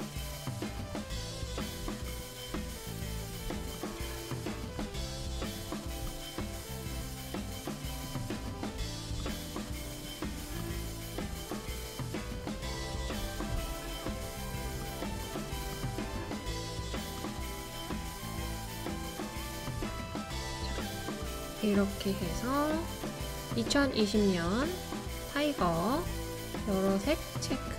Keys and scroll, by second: 2.8 typing, 11.0 typing.